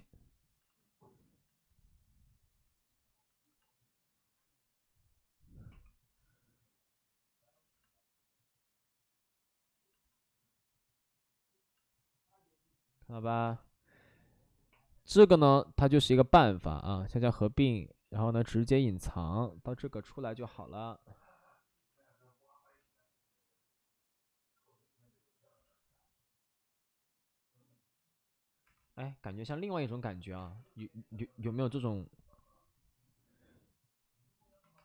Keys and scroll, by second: 0.6 alt+s, 3.6 alt+s, 4.1 alt+s, 5.6 w, 7.5 ctrl+z, 13.4 2, 21.7 ctrl+z, 25.5 ctrl+z, 28.6 2, 30.3 2, 30.6 c, 34.7 2.